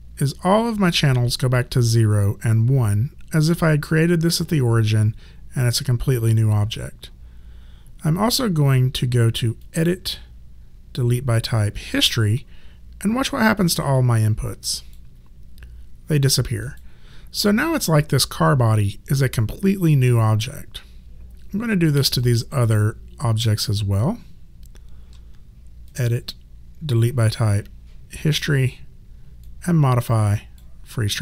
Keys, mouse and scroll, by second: 9.6 click, 13.9 click, 16.7 click, 22.1 click, 23.7 shift+click, 25.9 click, 29.4 click.